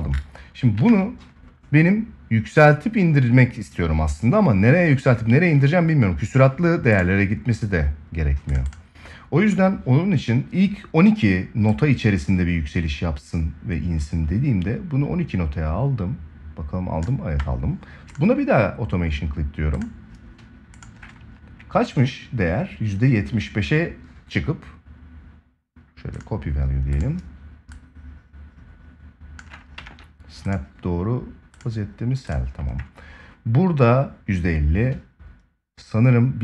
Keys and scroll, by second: 0.5 ctrl+s, 29.5 ctrl+s.